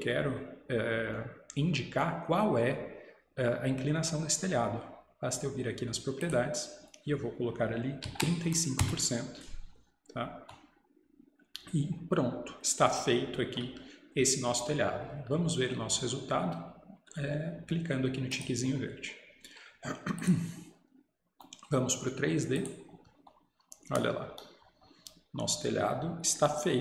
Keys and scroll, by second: 8.1 typing.